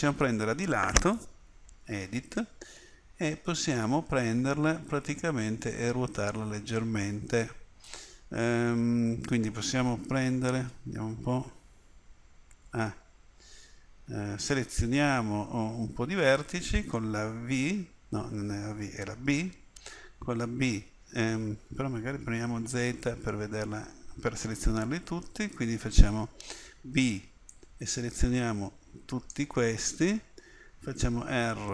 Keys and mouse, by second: 1.9 Tab, 10.4 a, 12.6 a, 17.6 v, 19.3 b, 22.8 z, 26.7 b, 31.1 r.